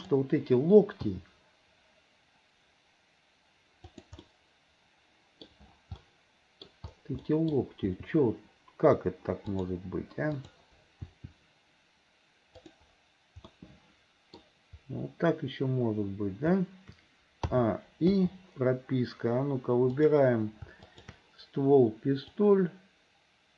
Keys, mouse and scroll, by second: 1.1 g, 4.3-5.5 middle drag, 6.0 middle click, 7.3 middle click, 7.8 g, 10.4 click, 11.1 r, 13.6 middle click, 17.6 a, 18.2 i, 19.9 click, 20.9 shift+click, 22.4-23.5 drag.